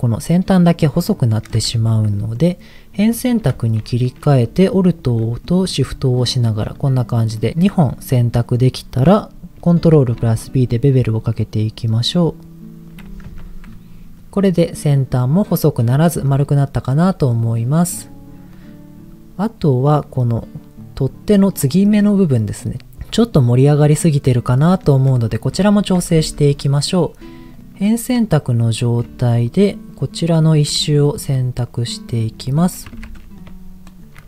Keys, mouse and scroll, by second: 0.7 middle click, 1.7 Tab, 2.1 middle click, 3.0 click, 3.5 shift+middle click, 3.8-4.4 scroll up 3, 4.8 alt+click, 5.4 middle click, 6.3 alt+shift+click, 7.4 middle click, 8.7 middle click, 9.1 scroll up 2, 9.9 ctrl+b, 12.8 click, 13.2 Tab, 13.8-14.6 scroll down 2, 14.2 middle click, 16.3 middle click, 17.8 click, 18.5-19.9 middle drag, 21.7 middle click, 24.6 middle click, 24.9-25.4 scroll up 3, 25.6 shift+middle click, 26.2 Tab, 27.5 click, 27.6 middle click, 28.5 click, 29.4 alt+shift+click, 30.4 alt+shift+click, 30.8 middle click, 32.1 shift+click, 33.0 ctrl+z, 33.2 middle click, 33.8 shift+click.